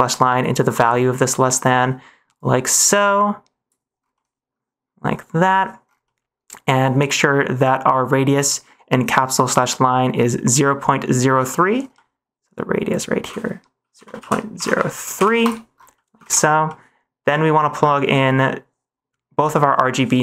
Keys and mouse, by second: 0.6 middle click, 1.6 middle click, 2.3-3.6 drag, 4.2 middle click, 6.1 middle click, 11.5 middle click, 12.0 middle click, 12.9-15.4 drag, 16.0 middle click, 16.2 ctrl+s, 16.6 middle click, 18.0 middle click.